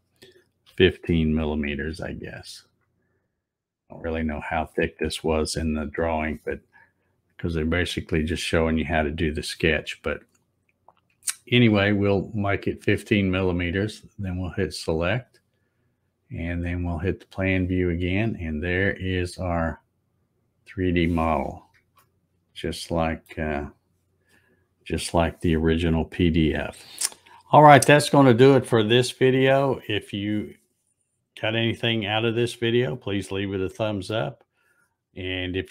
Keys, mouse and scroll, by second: 14.5 click, 16.9 click, 19.9-20.8 scroll up 1, 22.0-23.3 shift+middle drag, 23.8 click.